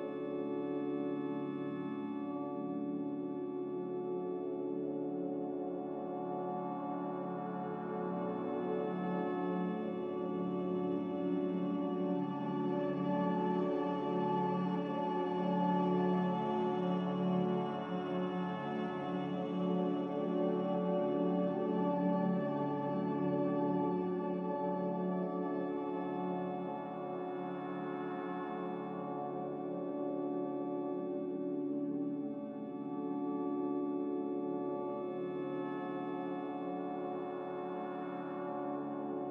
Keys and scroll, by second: 7.7 ctrl+c, 8.0 ctrl+v, 22.6 z, 25.2 Delete, 29.6 ctrl+z, 31.9 Delete, 32.6 a, 35.2 z.